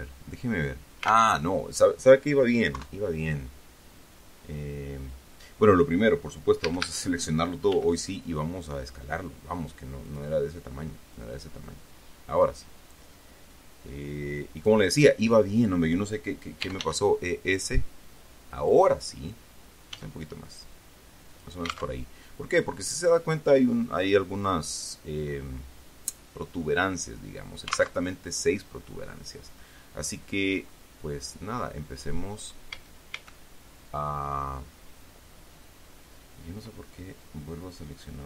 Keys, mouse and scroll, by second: 0.0 alt+Tab, 1.7 alt+Tab, 3.1 KP_3, 4.0-4.7 scroll down 4, 5.3-5.7 scroll up 2, 5.8 scroll down 2, 7.0 a, 8.1 s, 10.4 click, 11.5-13.0 drag, 13.9-15.2 drag, 17.0 e, 17.1 s, 18.9 click, 20.3 s, 21.7 click, 22.2 alt+Tab, 28.4 alt+Tab, 31.0-31.6 scroll up 4, 33.1 a.